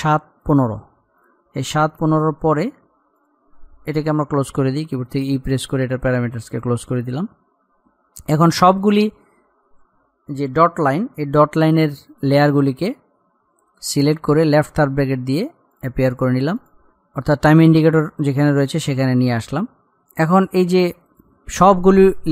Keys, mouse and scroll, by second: 1.3 click, 1.8-2.1 scroll up 1, 2.6 click, 4.9 e, 5.3-5.7 scroll down 1, 6.7 click, 8.1-8.5 scroll up 1, 8.9 shift+click, 12.8-14.1 scroll up 1, 14.7 [, 15.9 click, 20.0 click.